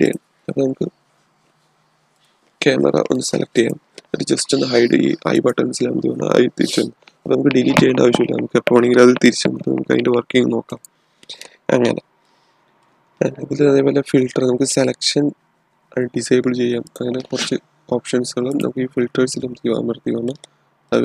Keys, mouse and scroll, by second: 0.0 click, 2.0 click, 10.6 click, 12.1-15.0 middle drag, 16.8 click, 20.2-21.0 middle drag.